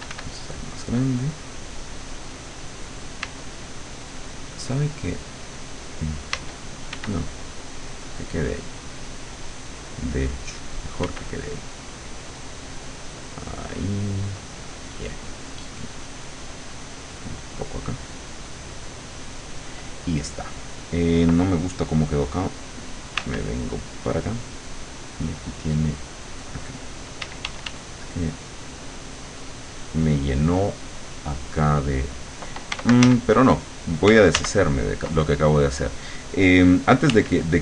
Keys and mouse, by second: 0.3-3.0 drag, 3.3 d, 6.3 d, 6.9 f, 7.1-11.1 drag, 11.1 f, 11.3-19.7 drag, 23.3 w, 27.3 d, 28.3 click, 28.9 click, 33.1 ctrl+z, 34.4 ctrl+z, 37.1 w.